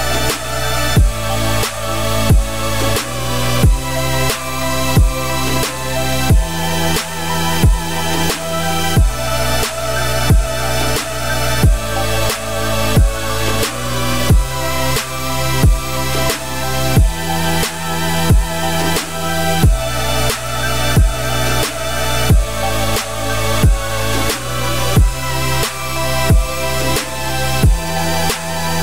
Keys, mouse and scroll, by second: 0.3 click, 0.5 `, 0.9 scroll down 4, 1.1-1.5 middle drag, 1.5 g, 2.3-3.3 scroll down 14, 3.3-5.1 middle drag, 5.1 click, 5.4 `, 6.2-6.8 scroll down 1, 6.8 shift+click, 7.0 scroll down 1, 7.1-8.3 middle drag, 8.3 r, 9.4-9.9 scroll down 11, 9.9-10.2 middle drag, 10.2-11.2 scroll down 4, 11.2-12.5 middle drag, 12.5 click, 12.7 `, 13.1 scroll down 4, 13.3-14.1 middle drag, 14.1 g, 15.5 r, 17.3 g, 18.3 click, 18.5 scroll down 2, 18.6-19.0 middle drag, 19.0-19.6 scroll down 10, 19.6-19.9 middle drag, 19.9-20.2 scroll up 2, 20.2-20.9 middle drag, 20.9-21.6 scroll up 4, 21.6-22.5 scroll down 2, 22.5 click, 23.2 g, 24.8 click, 25.0 scroll up 2, 25.2 `, 25.8 scroll down 2, 26.1 r.